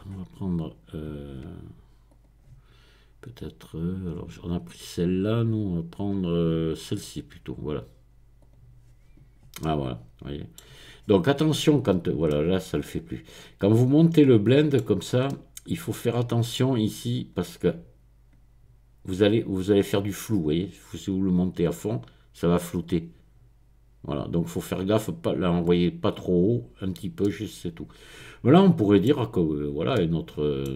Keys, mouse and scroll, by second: 2.1 click, 4.7-5.4 scroll down 2, 5.5-6.4 scroll down 2, 7.0 click, 8.4 click, 9.6-10.9 middle drag, 11.0-12.0 scroll up 1, 12.3-14.6 middle drag, 15.0-15.9 scroll up 1, 15.9-17.0 scroll up 1, 17.2-22.2 drag, 22.8-26.7 drag, 26.8-27.2 scroll down 1, 29.1-29.9 scroll down 2.